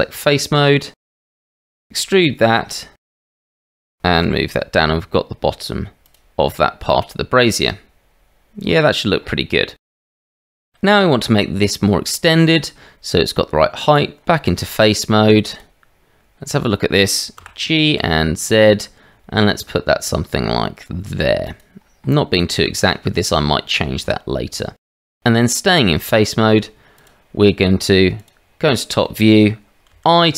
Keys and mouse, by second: 0.2 click, 1.1 click, 1.8 e, 3.6 Tab, 4.2 g, 9.7 middle drag, 10.3 middle click, 10.6 middle click, 10.9 shift+middle drag, 12.2-12.6 middle drag, 13.5 Tab, 14.5-15.6 drag, 17.4 g, 24.8 middle click, 25.5 middle click, 28.2 click, 29.1 shift+middle click, 29.9 i.